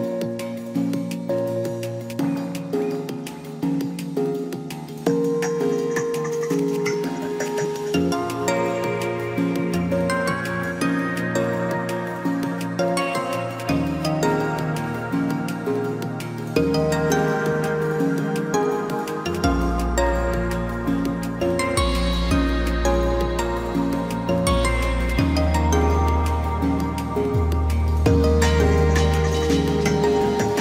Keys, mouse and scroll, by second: 3.6 Left, 6.4 ctrl+s, 11.0 ctrl+-, 18.1 ctrl+j, 23.2 ctrl+t.